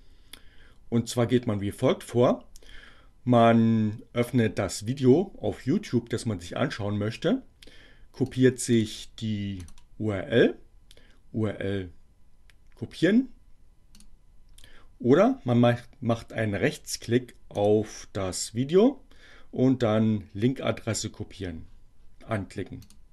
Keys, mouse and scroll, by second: 8.4 click, 8.8 click, 14.0 click, 16.6-18.0 right drag, 22.4 click.